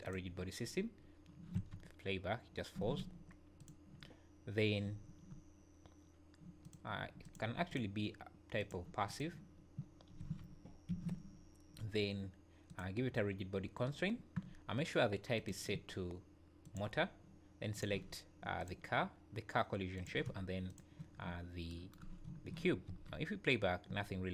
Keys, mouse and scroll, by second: 0.1 click, 1.6 space, 2.8 Escape, 3.6 click, 7.2 click, 9.1 click, 10.2 space, 10.9 Escape, 12.7 click, 15.4 click, 20.0 click, 21.3 scroll down 2, 22.4-23.0 scroll down 3, 22.9 space.